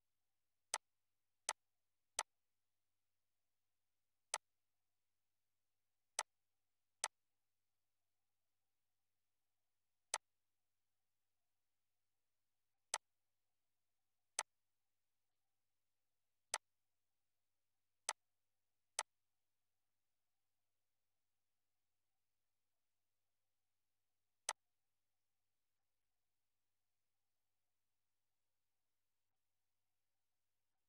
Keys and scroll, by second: 19.9 BackSpace, 21.9 1, 22.4 2.